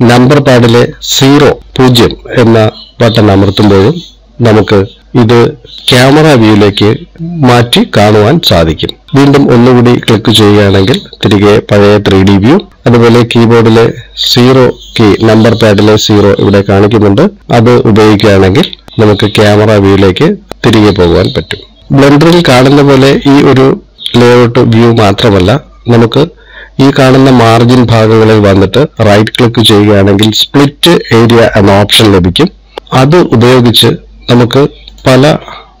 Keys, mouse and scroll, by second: 9.1 click, 10.9 click, 15.2 KP_0, 21.3 KP_0, 30.0 right click.